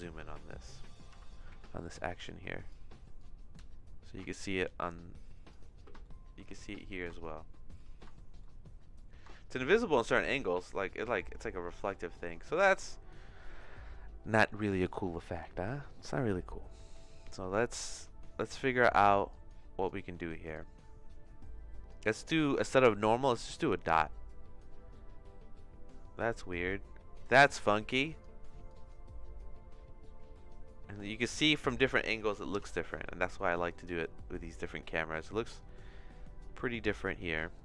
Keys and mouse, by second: 1.8 click, 1.8 n, 3.2-5.5 drag, 6.1 shift+click, 6.9 click, 7.8 click, 7.9 middle click, 8.3 shift+middle click, 9.1 middle click, 9.5-12.4 shift+middle drag, 12.6 click, 17.1-18.6 drag, 19.3 click, 20.5-21.9 drag, 22.5 click, 23.9-27.2 drag, 27.6 click, 28.6-31.6 drag, 32.5 n, 33.7-37.0 shift+middle drag, 37.5-37.6 drag.